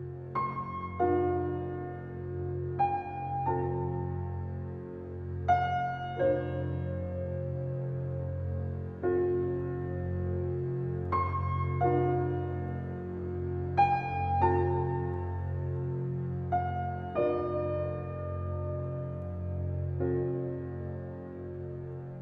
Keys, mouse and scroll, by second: 1.1 scroll down 1, 1.9-3.5 alt+drag, 3.5 alt+middle click, 4.5 scroll up 1, 4.9-6.4 alt+middle drag, 6.4-6.8 scroll down 1, 6.8 5, 7.3 scroll down 1, 7.7 click, 7.8-10.1 alt+drag, 10.1 alt+right click, 10.5 click, 11.0 alt+right click, 11.3 alt+click, 11.9-14.4 right drag, 14.4 alt+click, 15.5-17.6 alt+drag, 17.6-19.1 ctrl+drag, 19.1-20.9 shift+drag, 20.9-22.2 shift+drag.